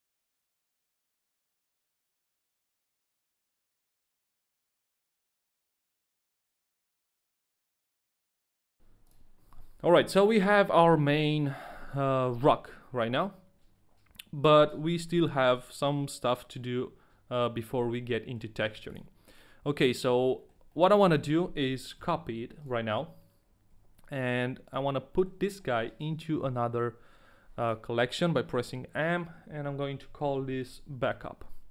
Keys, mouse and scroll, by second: 8.0 shift+middle click, 8.0 click, 8.0 scroll down 1, 8.1 middle click, 8.1 a, 8.2 middle click, 8.2 right click, 8.2 a, 8.3 middle click, 8.3 shift+middle click, 8.3 scroll up 2, 8.4 shift+middle click, 8.5 shift+middle click, 8.6 middle click, 10.5-11.1 scroll down 1, 11.1 middle click, 11.6 scroll down 1, 12.3 shift+middle click, 12.3 scroll down 2, 18.2 middle click, 18.9 ctrl+a, 18.9 middle click, 20.0 scroll down 1, 20.5 ctrl+a, 20.5 middle click, 20.5 scroll down 1, 20.7 middle click, 21.2 ctrl+a, 21.2 shift+middle click, 21.2-21.9 scroll down 1, 22.9 shift+middle click, 22.9-23.5 scroll down 1, 22.9 shift+d, 23.7 a, 24.6 click, 25.1 middle click, 25.6 click, 25.6 shift+middle click, 25.6 a, 26.4 m, 31.1 Return.